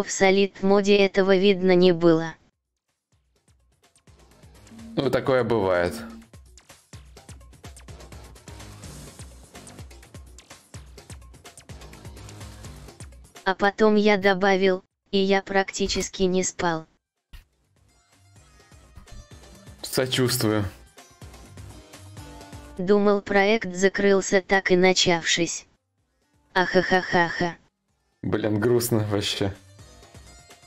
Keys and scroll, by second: 14.9 BackSpace, 16.5-17.4 typing.